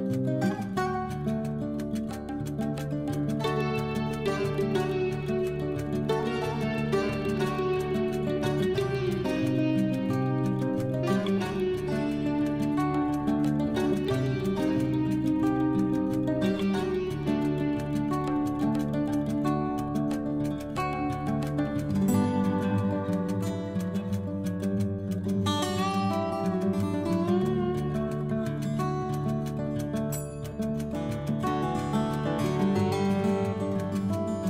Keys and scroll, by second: 7.8 ctrl+Home, 18.0 Right, 26.4 ctrl+z, 28.9 ctrl+z.